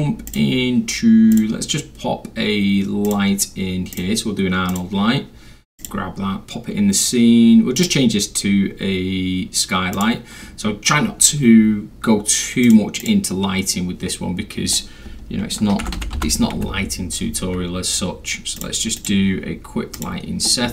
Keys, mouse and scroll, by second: 0.3 click, 1.3 click, 3.1 click, 3.9 click, 4.7 click, 5.8 click, 7.8 click, 9.9 click, 11.2 scroll, 11.2 middle click, 11.2 scroll down 1, 12.7 click, 13.0 click, 15.8 h, 16.6 i, 18.6 click, 19.0 click, 20.0 click.